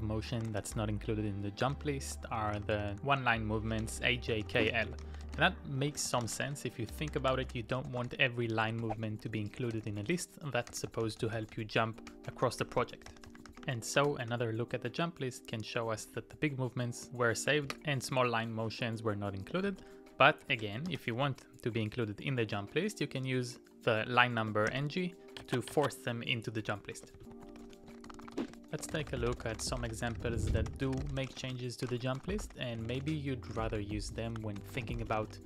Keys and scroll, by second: 0.0-13.6 typing, 14.0 Return, 16.0 Up, 16.3 Down, 17.7 ctrl+c, 19.7-21.6 typing, 24.7 ctrl+o, 26.9-35.4 typing.